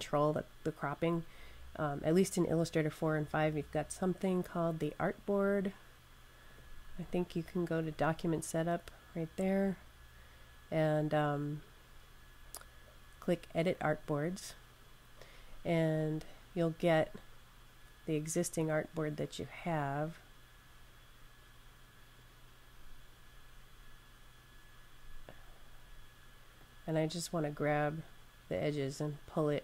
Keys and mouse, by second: 4.9 click, 13.6 click, 18.7 click, 26.4 click.